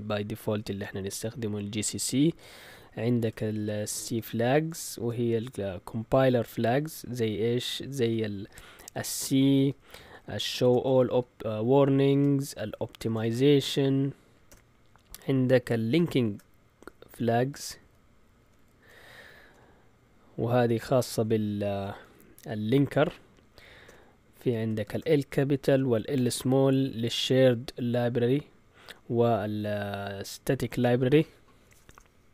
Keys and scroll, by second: 1.8 Return, 2.0 Return, 2.4-6.0 typing, 7.7-13.1 typing, 14.5 typing, 15.7-19.5 typing, 23.8-26.2 typing, 31.6 BackSpace, 31.9 BackSpace.